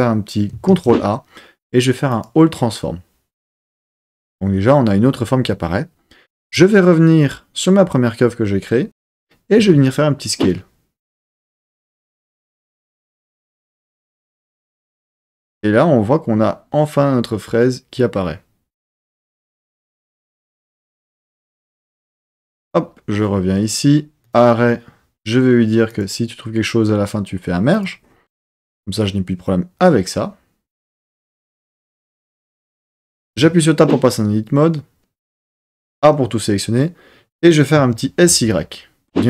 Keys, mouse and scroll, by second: 0.6 ctrl+a, 6.4 click, 9.5 s, 21.3 click, 22.6 click, 24.2 click, 26.1 click, 27.7 click, 33.5 Tab, 35.5 a, 37.7 s, 38.4 y.